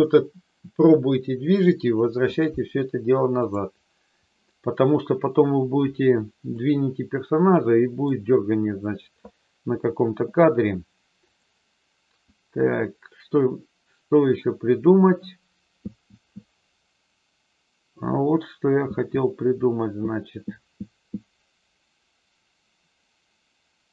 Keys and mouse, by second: 3.4 click, 6.5-8.1 middle drag, 11.2-23.9 drag.